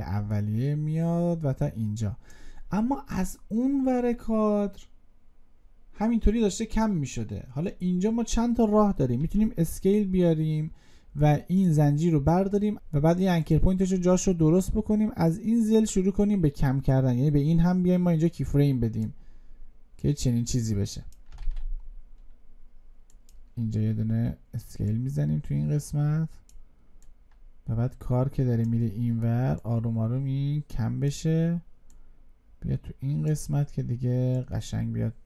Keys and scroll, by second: 21.3 ctrl+z.